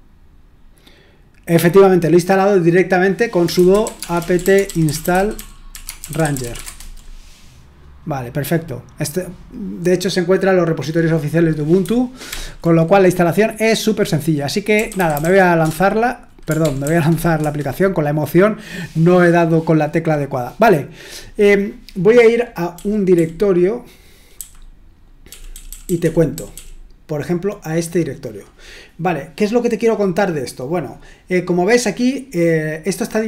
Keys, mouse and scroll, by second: 3.2-7.0 typing, 12.3 ctrl+l, 14.5-17.3 typing, 17.4 Return, 22.7-26.5 typing.